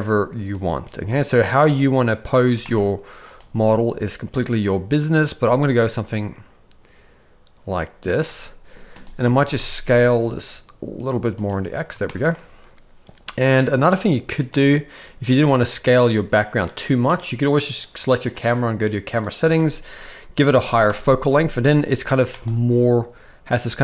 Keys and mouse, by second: 0.8 g, 2.6 g, 3.3 g, 9.4 s, 12.1 shift+middle click, 14.4 click, 19.3-20.9 drag, 22.1 g.